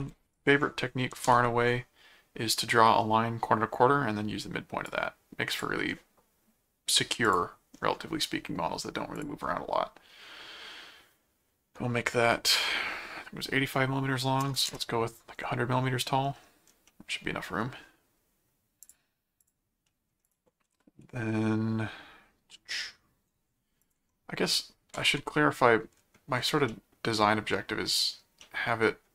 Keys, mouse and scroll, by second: 0.3 ctrl+click, 1.2 alt+m, 4.9 click, 7.2 click, 9.1 click, 16.9 middle click, 18.8 click, 19.6 click, 19.9 middle click, 20.3 click, 20.6 s, 23.8 ctrl+click, 24.0 ctrl+Tab, 24.9 ctrl+Tab, 26.7-28.1 middle drag, 28.4 middle click.